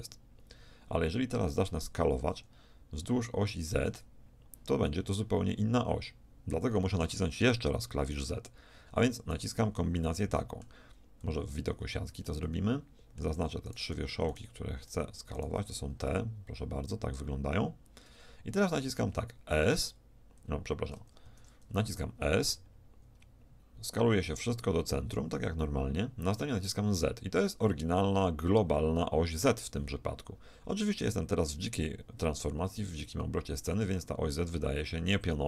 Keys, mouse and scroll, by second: 2.4 s, 10.0-11.3 middle drag, 11.3 a, 11.8 z, 13.7-15.2 shift+middle drag, 15.8-17.8 middle drag, 19.7 a, 21.3 ctrl+z, 22.6 s.